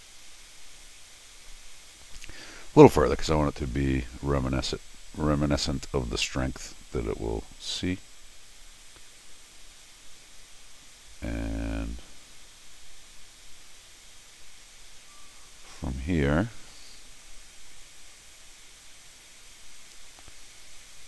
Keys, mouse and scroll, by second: 7.6 click, 9.8-21.0 drag.